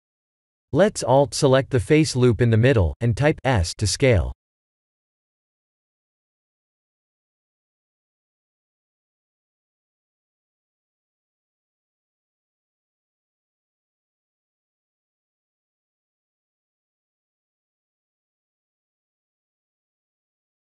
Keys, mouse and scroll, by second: 0.5 alt+click, 1.5 s, 5.2 Tab, 6.1 shift+middle click, 7.0 shift+middle click, 7.5 shift+middle click, 8.3 shift+middle click, 8.7 shift+middle click, 9.3 shift+middle click, 9.8 scroll down 3, 10.0 Tab, 10.4-10.8 scroll down 3, 10.8 shift+middle click, 11.7-12.4 scroll up 3, 13.0 alt+click, 13.7 alt+click, 14.3 s, 17.2 alt+click, 17.8 s, 19.2 shift+middle click.